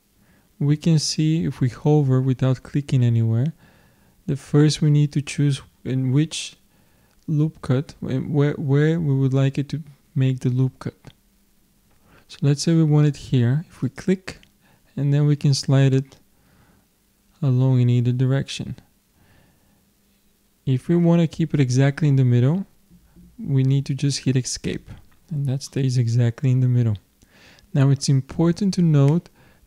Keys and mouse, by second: 25.7-27.6 middle drag.